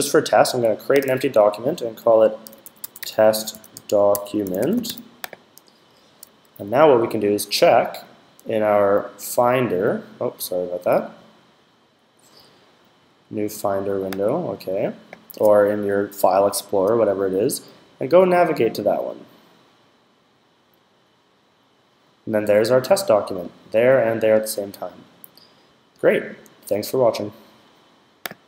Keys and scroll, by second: 2.0-5.3 typing.